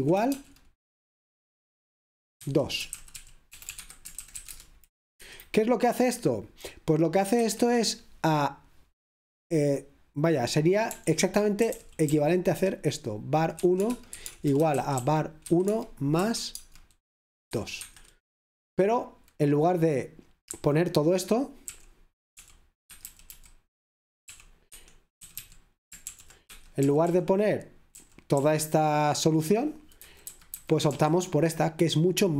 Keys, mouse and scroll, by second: 0.0-0.4 typing, 2.3-5.2 typing, 7.5 Escape, 11.0-12.2 typing, 13.4-18.3 typing, 20.6 typing, 22.8-30.9 typing, 24.7 Escape, 26.4 Escape.